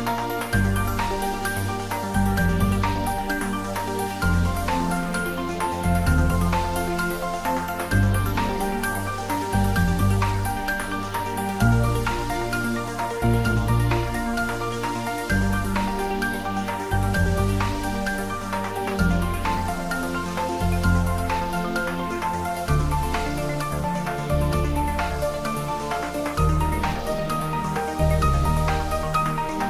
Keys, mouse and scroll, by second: 3.6-5.8 drag, 5.8 ctrl+z, 7.4 ctrl+z, 12.3 g, 14.7 click, 16.4 shift+d, 24.7 click, 26.3 r.